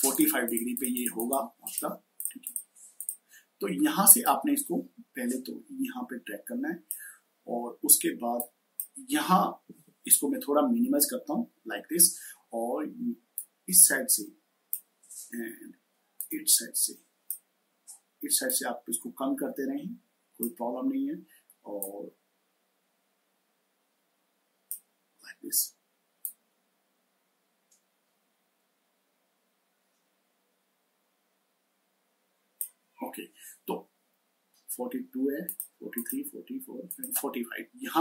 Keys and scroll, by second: 10.6 ctrl+-.